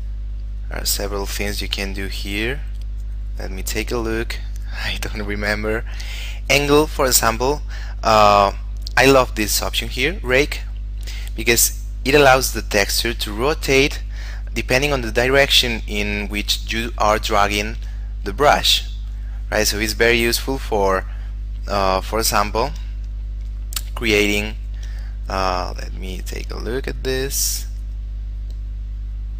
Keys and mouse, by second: 3.3 click, 10.2 click, 10.8 shift+middle click, 11.8 click, 14.6 shift+middle click, 15.6 click, 17.7 shift+middle click, 18.5 click, 22.6 shift+middle click, 24.7 shift+middle click, 26.0 click, 28.2 click.